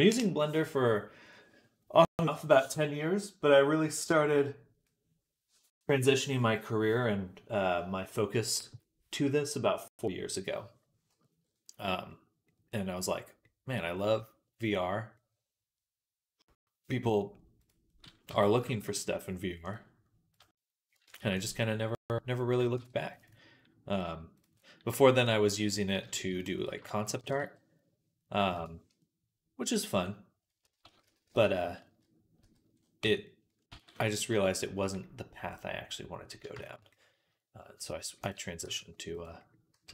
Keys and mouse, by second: 11.7 click, 11.9-17.5 middle drag, 17.5-26.8 drag, 18.1 Tab, 21.0 ctrl+r, 26.8-33.3 middle drag, 27.0 g, 30.5-32.6 ctrl+z, 32.9 Tab, 33.3 ctrl+click, 33.6 ctrl+s, 33.6-39.9 middle drag, 38.1 click, 38.5 g, 39.6 s.